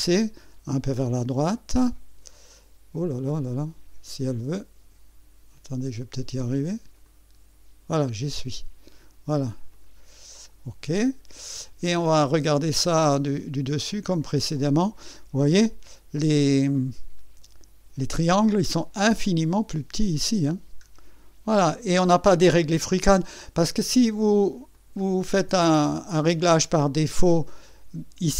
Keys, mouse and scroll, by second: 0.9-5.1 drag, 7.0-9.0 drag, 9.7 click, 10.9 click, 11.9 scroll up 1, 13.3 click, 14.3-16.7 scroll down 1, 16.7-18.3 right drag, 18.8-19.7 scroll up 2, 20.4 scroll up 1, 21.2-22.3 scroll down 3, 24.7 click, 27.4 click.